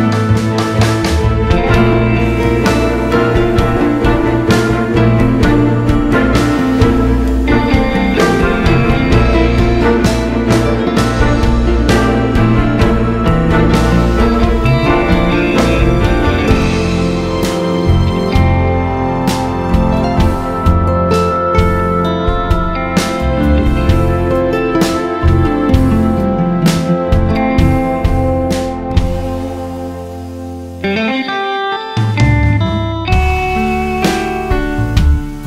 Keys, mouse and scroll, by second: 0.1 Tab, 0.8 alt+a, 1.6 alt+click, 2.0 g, 4.6 click, 7.0 2, 7.6 click, 8.0 3, 8.6 2, 9.0 click, 9.9 3, 10.2 click, 12.9 alt+s, 15.8 click, 16.3 c, 16.8 x, 17.3 1, 17.5 alt+click, 17.9 g, 18.3 right click, 18.8 click, 19.1 g, 19.6 `, 19.9 Tab, 20.2 `, 21.6 click, 23.0 g, 23.5 ctrl+z, 23.6 click, 23.8 g, 24.4 click, 24.8 shift+click, 25.3 shift+click, 25.8 g, 26.5 2, 26.6 click, 27.0 3, 27.1 click, 27.4 g, 28.7 1, 28.8 `, 29.4 click, 29.8 shift+click, 30.1 g, 33.6 2, 33.9 alt+click, 34.2 alt+shift+click, 34.8 ctrl+b.